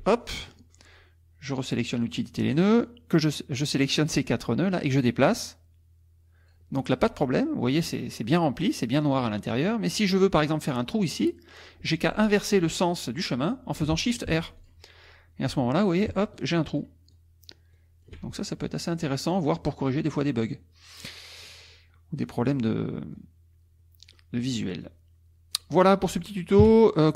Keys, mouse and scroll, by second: 2.0 click, 2.8-4.1 drag, 5.3-6.7 drag, 6.8 click, 7.7 click, 9.6 click, 11.3 click, 14.3 shift+r, 14.6 shift+click, 15.5 click, 16.4 shift+click, 17.1 shift+click, 17.7 shift+click, 18.5-21.9 shift+drag, 22.0 middle click, 22.0 click, 23.1 click, 24.8-26.0 drag, 26.6 KP_5.